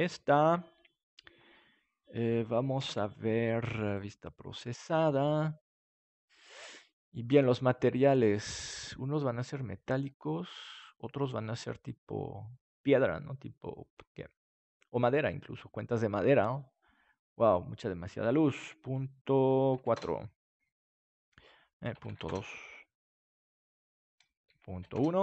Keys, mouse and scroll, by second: 0.0-2.7 drag, 2.7 ctrl+s, 3.8-7.3 drag, 21.8 click, 22.4-23.7 drag, 24.4-25.2 drag.